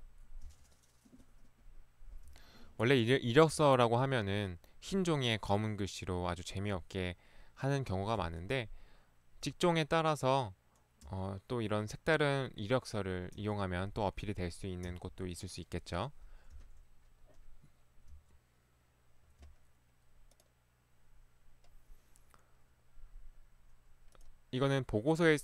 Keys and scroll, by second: 0.4 Right, 2.2 Right, 3.5 Right, 6.3 Right, 6.7 Right, 8.2 Right, 9.4 Right, 11.1 Right, 13.4 Right, 14.8 Right, 16.6 Right, 18.0 Right, 19.6 Right.